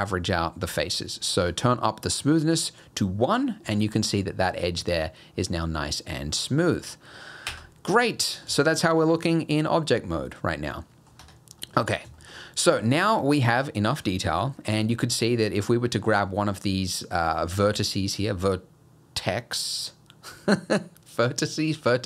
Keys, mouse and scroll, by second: 1.5 click, 6.2 scroll down 2, 6.5 middle click, 7.5 Tab, 8.0 middle click, 8.6 shift+middle click, 8.9 scroll down 2, 9.1 middle click, 11.2 Tab, 11.6 middle click, 12.2 shift+middle click, 12.9 click, 13.4 click, 14.1 scroll up 1, 14.5 shift+middle click, 14.9 middle click.